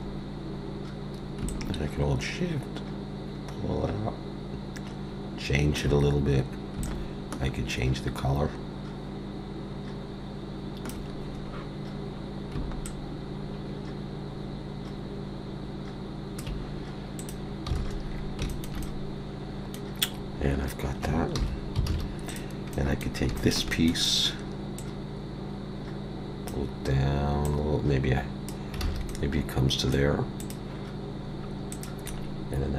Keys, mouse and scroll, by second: 17.2 click, 17.8 alt+a, 18.1 scroll down 3, 18.5 shift+middle click, 18.8 middle click, 20.0 scroll up 4, 20.4 scroll down 2, 21.4 alt+h, 21.9 alt+a, 22.3 click, 22.7 middle click, 23.4 shift+middle click, 23.7 middle click, 24.8 click, 27.4 click, 28.9 alt+a, 29.1 middle click, 30.4 click, 31.7 click, 32.1 scroll down 1.